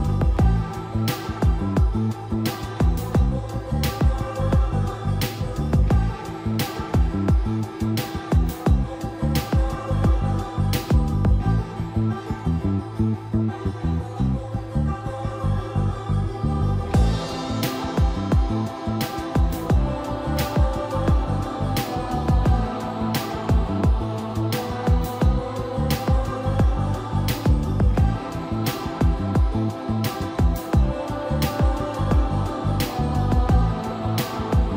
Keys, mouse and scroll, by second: 0.0-4.2 typing, 0.6 click, 2.9 click, 4.8 click, 6.5 1, 7.1 Escape, 8.0 m, 8.5 click, 9.1-10.2 typing, 11.4 click, 11.7 typing, 14.1 c, 14.6 click, 15.2 Escape, 15.5-17.2 typing, 19.1 click, 20.3 middle click, 22.0 shift+middle click, 25.5-26.9 shift+middle drag, 28.3-29.9 typing, 30.7 shift+middle click, 33.0 click, 34.0-34.7 shift+middle drag.